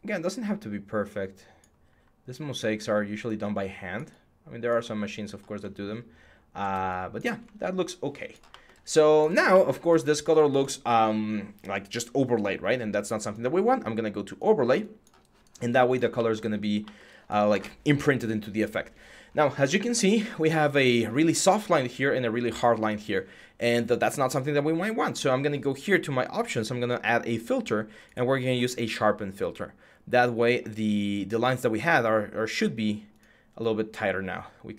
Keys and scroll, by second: 1.6-2.5 typing, 6.6 x.